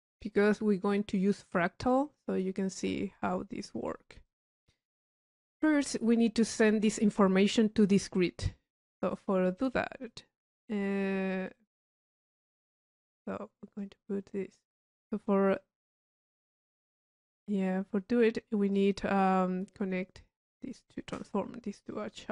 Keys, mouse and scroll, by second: 1.0 click, 1.6 click, 2.3 click, 3.3 click, 4.3 click, 4.7 middle click, 5.0 click, 5.6 right click, 6.2 click, 8.7-10.5 drag, 10.5 middle click, 10.9 right click, 11.7 click, 13.2 click, 14.3 middle click, 14.4 middle click, 14.5 click, 18.7 click, 21.9 click.